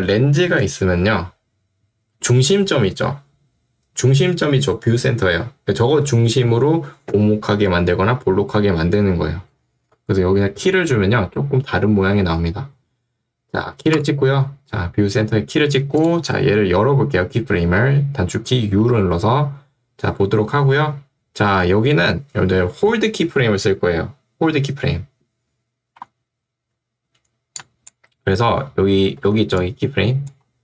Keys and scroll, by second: 9.9 Escape, 18.8 u, 29.3 ctrl+2.